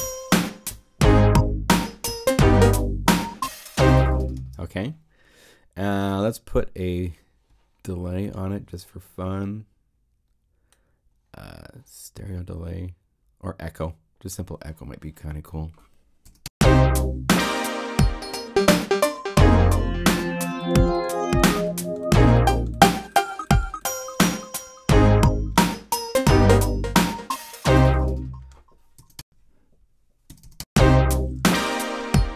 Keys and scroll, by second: 16.2 0, 16.4 Home, 29.0 0, 29.2 Home, 30.6 Home, 31.2 super+Home.